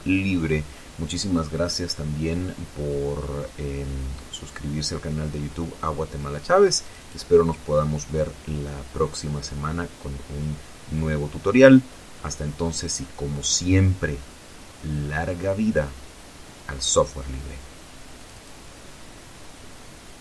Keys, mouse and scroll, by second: 18.8 click.